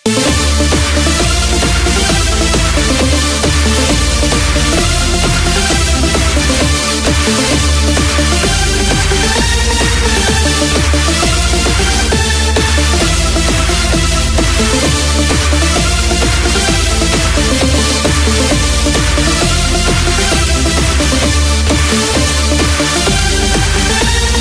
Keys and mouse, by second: 16.3-21.1 drag, 21.6 KP_3.